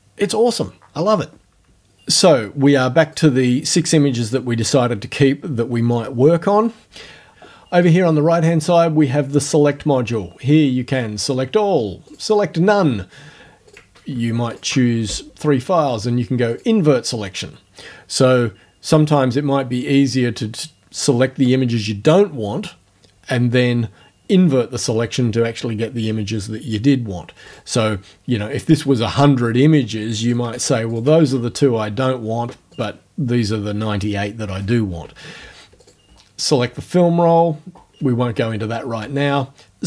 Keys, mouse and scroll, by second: 3.1 click, 4.3 click, 10.9 click, 12.1 click, 13.7 click, 14.5 shift+click, 16.5 click, 27.5 click, 30.3 click, 30.9 shift+click, 32.7 click, 35.9 click.